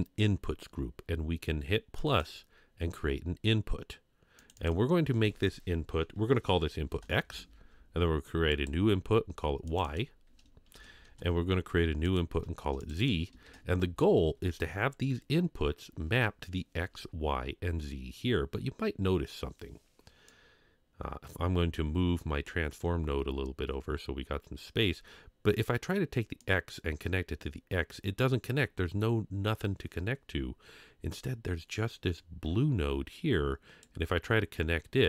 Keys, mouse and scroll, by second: 2.0 click, 4.4 click, 4.5-7.6 drag, 8.5 click, 9.7 click, 9.8-11.1 drag, 12.0 click, 12.8-14.3 drag, 20.2-23.3 drag, 26.4-33.8 drag.